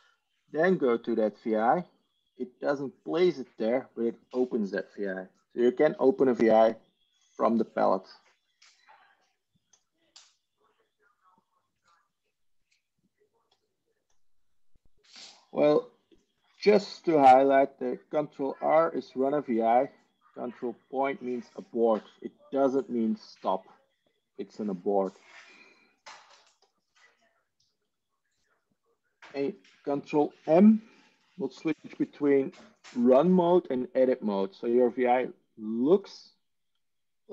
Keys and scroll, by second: 31.8 ctrl+m.